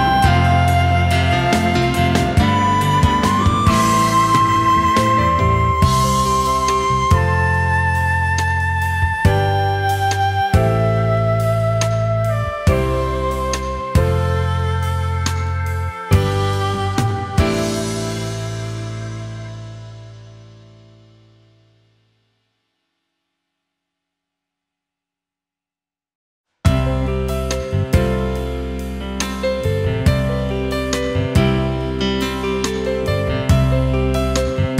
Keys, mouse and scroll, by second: 0.1 alt+click, 0.5 alt+click, 0.6 space, 0.7 alt+click, 1.0 alt+click, 1.3 space, 1.5 alt+click, 2.0 alt+click, 2.4 alt+click, 2.6 alt+click, 2.9 alt+click, 3.0 alt+click, 3.2 alt+click, 3.4 alt+click, 3.8 alt+click, 4.0 alt+click, 4.2 alt+click, 4.7 ctrl+shift+a, 4.9 alt+click, 5.3 alt+scroll down 1, 5.5 alt+click, 5.7 alt+click, 5.9 alt+click, 6.5 alt+click, 6.8 alt+click, 7.0 alt+click, 7.3 alt+click, 7.5 alt+click, 8.7 alt+click, 9.9 alt+scroll up 1, 10.9 alt+click, 12.7 alt+click, 14.5 ctrl+shift+a, 15.4 alt+scroll down 1, 15.6 space, 16.2 alt+scroll up 1, 17.0 alt+click, 19.3 ctrl+shift+a, 22.6 ctrl+shift+a, 23.9 ctrl+shift+a, 24.5 alt+click, 27.8 ctrl+shift+a, 28.2 alt+scroll down 1, 28.5 space, 29.5 alt+scroll down 1, 29.7 space, 30.5 alt+scroll down 1, 30.8 space, 31.6 alt+scroll up 1, 31.9 space, 32.6-33.0 alt+scroll up 1, 34.6 alt+scroll down 1.